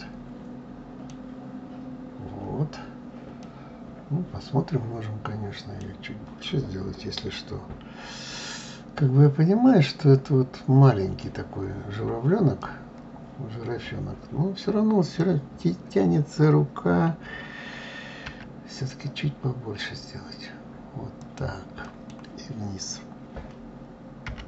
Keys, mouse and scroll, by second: 1.7-3.2 scroll up 2, 3.2-6.2 middle drag, 12.4-15.4 middle drag, 21.6-24.0 middle drag, 24.0 g.